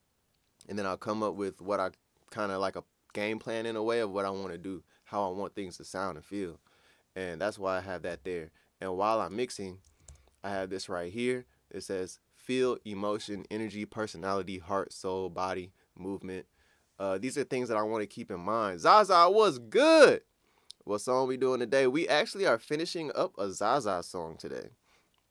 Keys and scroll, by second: 10.1 ctrl+scroll up 1.